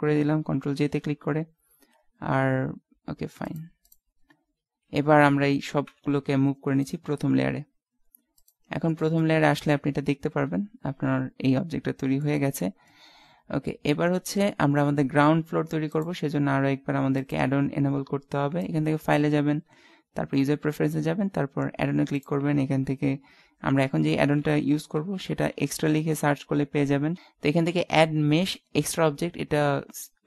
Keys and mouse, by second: 0.7 ctrl+j, 1.2 middle click, 3.5 click, 4.3-5.7 middle drag, 5.9 m, 8.6 click, 8.9-11.1 middle drag, 12.5-15.9 middle drag, 15.9-17.7 drag.